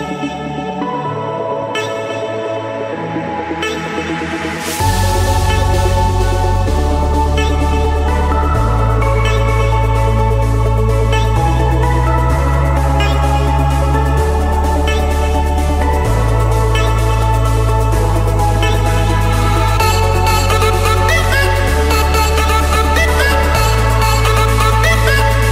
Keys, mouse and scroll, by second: 0.0 right click, 0.8 right click, 1.2-3.3 drag, 3.9-5.1 middle drag, 5.1-7.2 typing, 9.7 click, 10.6 click, 12.6-14.2 typing, 14.9 Escape, 15.8 click, 16.1 click, 17.3-17.6 typing, 18.3 Return, 20.1 click, 20.9 click, 22.2 click, 22.5 click, 23.6 m, 24.1 Return.